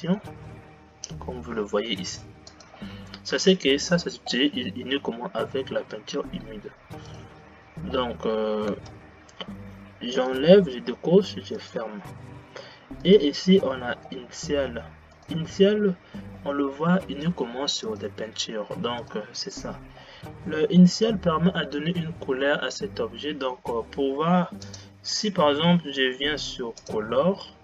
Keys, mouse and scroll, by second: 7.2 click, 9.0 space, 10.4 click, 11.8-18.2 drag, 19.2 click, 20.2-22.9 drag, 24.8-27.6 drag.